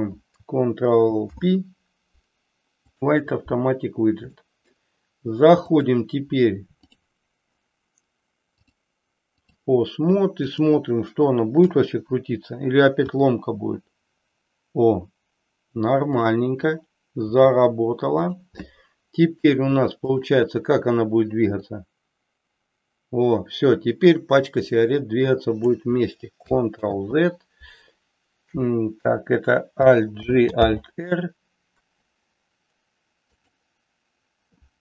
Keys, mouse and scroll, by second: 1.3 ctrl+p, 4.4 middle click, 5.5 click, 6.9 click, 8.5-9.6 drag, 11.7 KP_3, 13.0 r, 17.3 r, 18.2 click, 18.8-19.5 middle drag, 20.2-20.8 drag, 21.8-25.6 drag, 26.8 ctrl+z, 30.1 alt+g, 30.6 alt+r, 33.3 click.